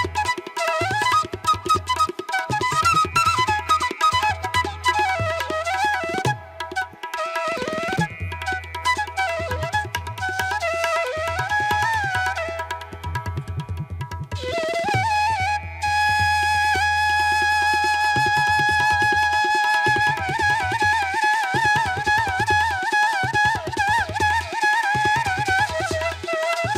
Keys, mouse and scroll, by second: 1.5 right click, 7.6 right click, 13.2 ctrl+alt+z.